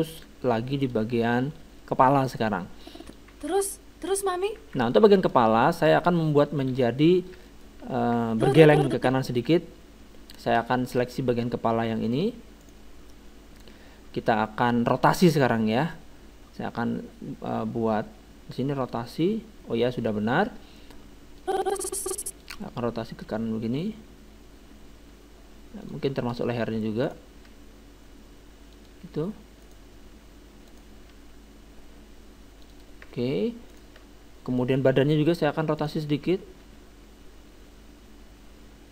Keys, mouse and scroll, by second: 0.0-2.2 drag, 1.1-3.6 middle drag, 2.8-4.6 drag, 3.3 alt+a, 4.7 alt+a, 4.9-7.3 middle drag, 6.7 KP_1, 8.3-9.9 drag, 10.7-12.4 middle drag, 12.6-14.5 right drag, 18.8-23.1 drag, 23.3 r, 26.3 middle click, 27.1-28.8 right drag, 27.4 r, 29.7-32.5 right drag, 31.1 r, 33.7-34.9 right drag, 34.6 click, 35.4 middle click, 36.3-37.5 right drag, 36.6 r.